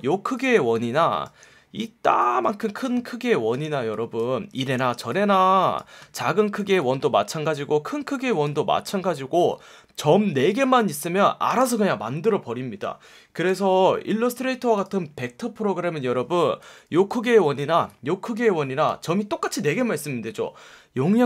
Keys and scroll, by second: 4.7 a, 6.6 a, 9.4 F1, 11.5 F1, 13.4 v, 17.4 super+z, 18.9 super+z.